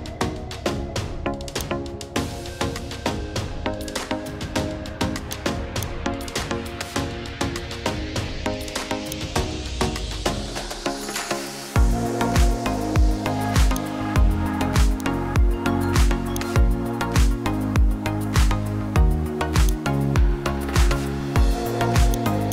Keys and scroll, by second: 17.4 KP_2, 17.6 KP_5, 18.1 Return.